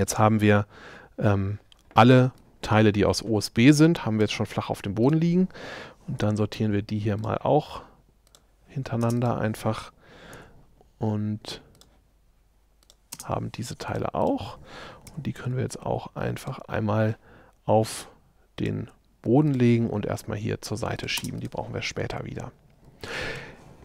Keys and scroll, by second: 6.2 m, 9.1 space, 10.4 m, 13.2 space, 15.1 shift+m, 21.2 space, 21.9 shift+space.